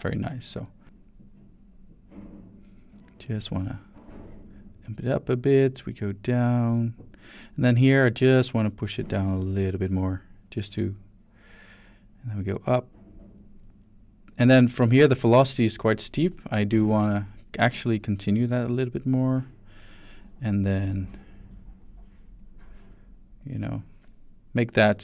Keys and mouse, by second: 4.0-7.2 drag, 7.8 drag, 8.7-9.7 drag, 10.5-15.0 drag, 15.7 shift+middle click, 16.8-17.4 drag, 17.7 shift+drag, 18.5 click, 20.7-21.8 drag, 22.4-23.8 drag, 24.6 click.